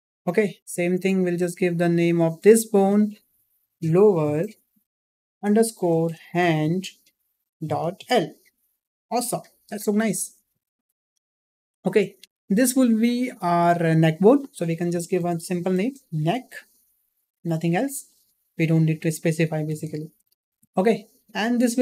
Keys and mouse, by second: 1.2 click, 1.7 click, 2.7-10.1 drag, 10.7 click, 11.7 shift+middle click, 14.1-18.6 drag, 20.3 shift+middle drag.